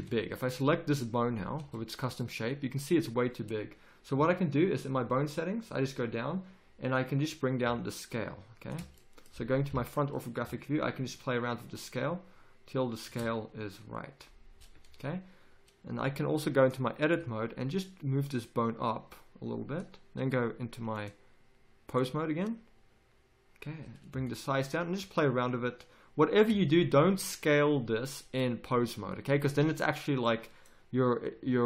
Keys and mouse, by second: 0.0 z, 1.6 z, 5.2-9.7 drag, 9.7 KP_1, 11.1-12.9 drag, 16.6 click.